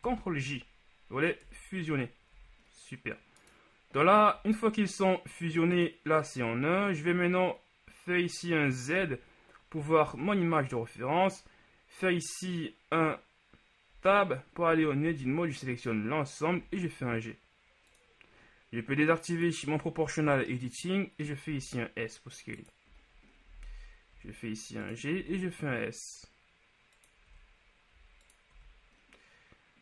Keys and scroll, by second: 0.2 ctrl+j, 1.5 KP_1, 2.4 a, 4.4 g, 9.2 z, 14.1 Tab, 14.8 a, 15.1 a, 16.6 g, 21.8 s, 24.2 g, 25.2 s, 27.4 g, 28.7 z.